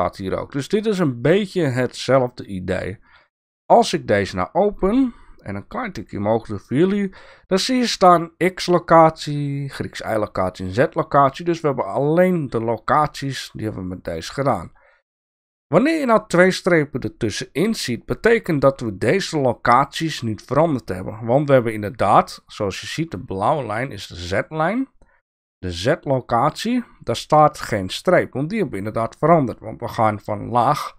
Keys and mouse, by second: 4.0 click, 5.5-6.7 drag.